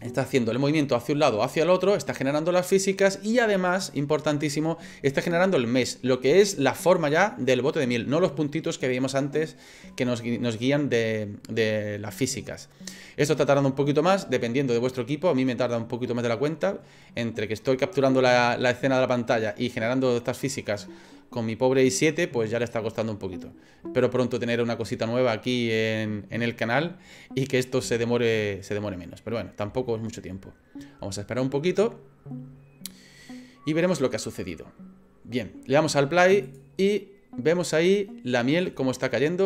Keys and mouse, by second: 34.9 click, 36.4 click, 38.7-39.4 middle drag.